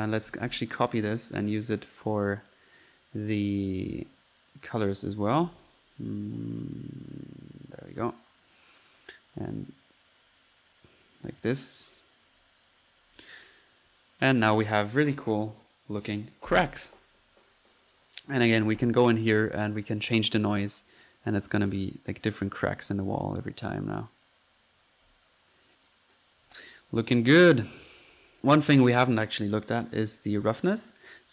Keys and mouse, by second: 0.0-0.9 typing, 0.0 click, 0.9-1.3 ctrl+drag, 1.9-4.0 drag, 4.2 click, 5.6 ctrl+z, 6.8-8.1 ctrl+drag, 9.3-10.5 drag, 11.9-12.5 drag, 12.7-13.1 drag, 12.9 typing, 13.1 F1, 13.2-13.9 drag, 17.1 Escape, 19.3-20.3 drag, 20.5 click, 25.1 F1, 26.5 Escape, 28.4 Escape.